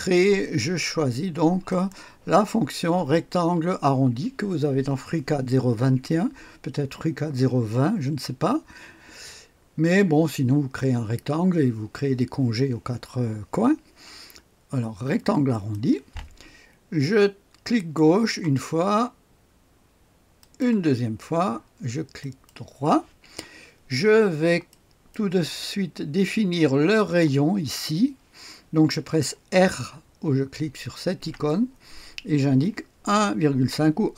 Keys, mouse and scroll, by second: 1.7 click, 1.7 middle click, 15.5 click, 15.5 middle click, 17.7 click, 20.4 click, 22.2 right click, 22.6 right click, 24.0-24.7 scroll up 1, 24.7 right click, 26.9 click, 31.2 r, 33.1 KP_1.